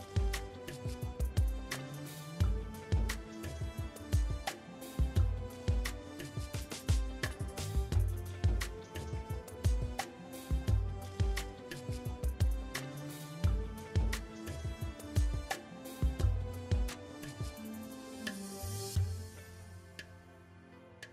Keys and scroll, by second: 9.4 ctrl+z, 19.1 ctrl+a.